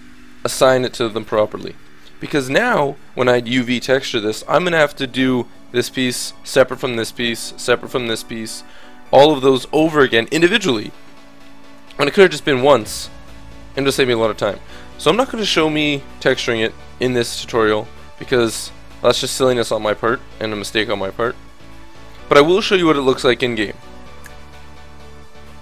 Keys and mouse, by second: 4.0 click, 4.7-6.7 middle drag, 8.8-12.7 middle drag, 14.9-18.4 middle drag, 18.9-21.5 middle drag.